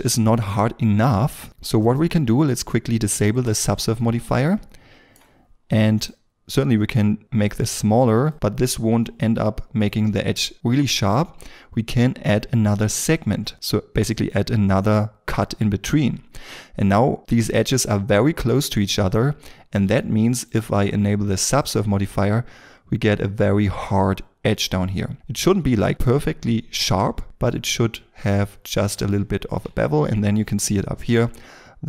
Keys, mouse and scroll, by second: 3.8 shift+middle click, 4.4 ctrl+middle click, 6.0 shift+click, 24.7-25.7 scroll down 1, 27.4 middle click, 29.0 shift+m, 30.9-31.7 scroll up 1.